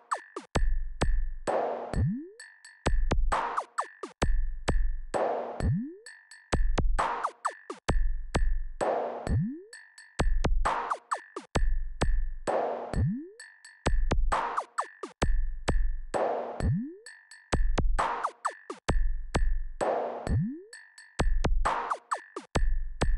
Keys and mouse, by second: 3.8 click.